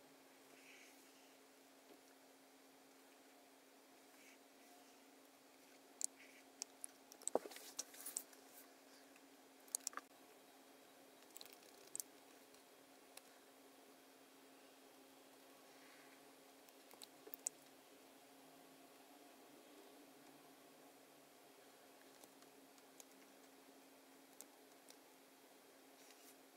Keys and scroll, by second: 7.5 super+F10, 8.0 super+F9, 9.8 shift+m, 11.4 super+=, 12.2 space, 17.3 super+F9.